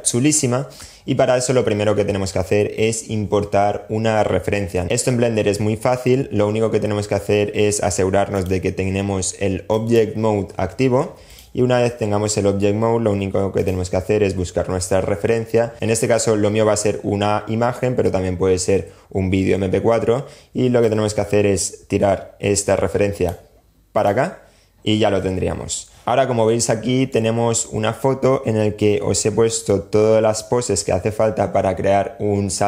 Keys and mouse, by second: 7.6-9.1 drag, 10.4 click, 23.1-25.5 drag, 26.0 shift+click.